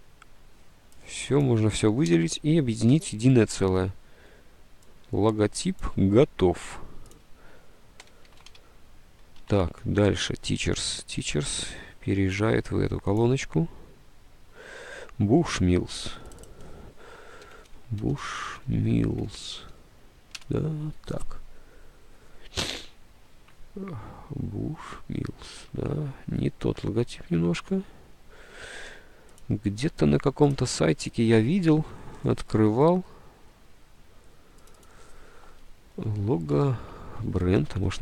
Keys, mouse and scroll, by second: 2.2 d, 8.4 ctrl+s, 9.4 alt+Tab, 9.8 ctrl+s, 12.5 alt+Tab, 15.6 alt+Tab, 17.3-20.1 typing, 20.5 Return, 21.7-22.5 typing, 23.5 alt+Tab, 25.7 alt+Tab, 36.1 Delete, 36.6 Right, 37.5-38.0 typing.